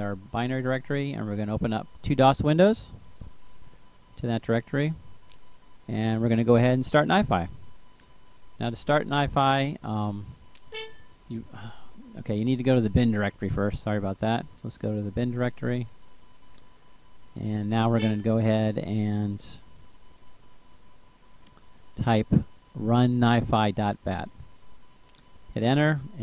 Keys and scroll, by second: 7.9-11.0 typing, 13.5 BackSpace, 14.6-18.4 typing, 16.1 Return, 20.2-22.9 typing, 24.8 Return.